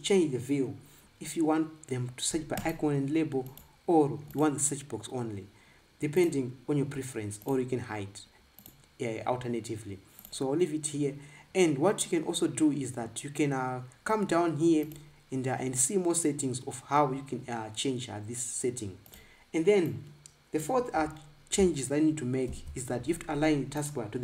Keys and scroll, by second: 23.3 ctrl+b.